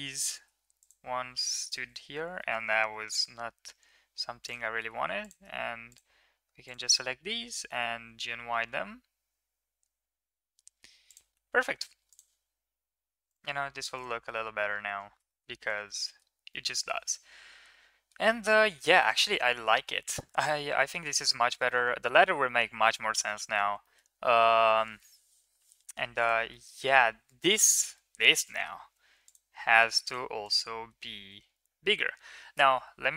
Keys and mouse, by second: 0.6 shift+click, 1.3 shift+click, 2.1 g, 5.1 drag, 5.7 shift+click, 6.5 shift+drag, 7.4 g, 11.3 Tab, 14.1 middle drag, 15.1 shift+middle drag, 15.4 ctrl+s, 15.9 shift+middle drag, 16.4-17.9 middle drag, 18.4 middle drag, 19.5 shift+middle drag, 20.4 shift+middle click, 20.6 middle click, 21.3 shift+middle click, 21.5 middle click, 23.6 shift+middle click, 26.3 middle click, 27.6 shift+middle drag, 28.3 middle click, 29.9 click, 30.2 click.